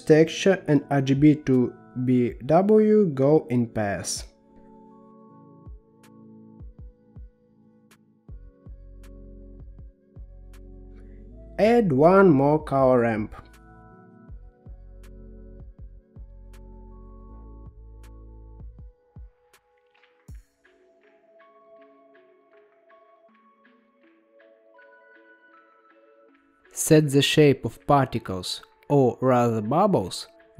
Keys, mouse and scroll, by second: 4.1 click, 6.1 shift+a, 9.2-10.7 drag, 11.2 middle click, 12.1 shift+a, 16.3-17.6 drag, 18.1-18.8 scroll down 4, 18.8-20.5 middle drag, 20.5-22.4 drag, 22.4 middle click, 23.8-24.7 scroll up 6, 24.7 middle click, 25.6-26.2 scroll up 5, 26.8-28.2 drag, 29.7-30.5 drag.